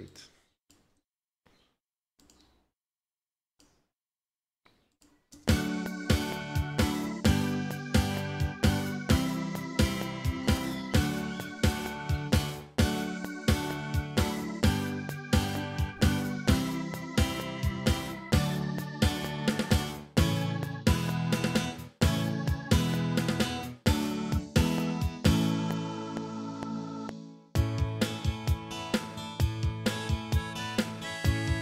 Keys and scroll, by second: 5.3 space, 6.2 ctrl+s, 9.2 ctrl+Left, 10.9 ctrl+s, 19.4 ctrl+s.